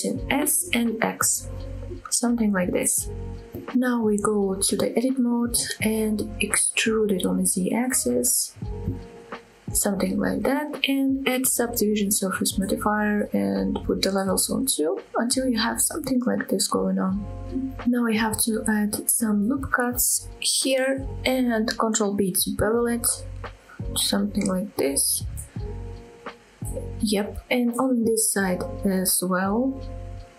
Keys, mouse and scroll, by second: 2.6 click, 3.0-3.6 scroll down 1, 3.6-4.1 middle drag, 4.2 scroll up 2, 4.6 shift+middle drag, 5.2 Tab, 6.3 scroll down 1, 7.0 e, 9.3 click, 9.7 middle click, 10.2 middle click, 11.3-12.8 drag, 14.6 click, 15.2 middle click, 16.0 middle click, 17.0 middle click, 19.1 ctrl+r, 20.2 right click, 20.7 middle click, 22.7 ctrl+b, 26.6 click, 26.9 middle click, 28.0 ctrl+r, 28.6 click, 28.6 right click, 29.2 ctrl+b.